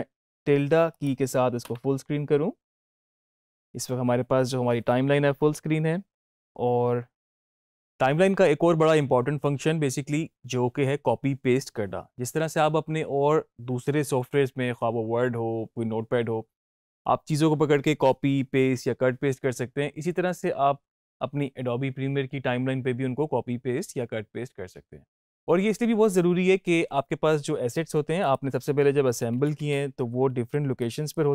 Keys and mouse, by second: 0.8 click, 28.1 click, 30.7-31.3 drag.